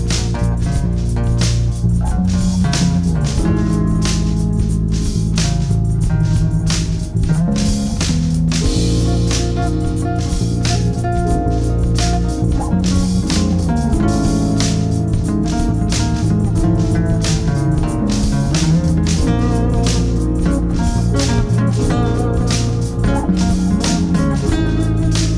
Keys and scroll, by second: 0.3 ctrl+z, 9.2 space, 13.6 ctrl+r, 15.7 ctrl+Page_Down, 19.6 ctrl+Page_Down, 23.1 Escape, 23.6 F3, 24.1 Escape, 24.5 F3.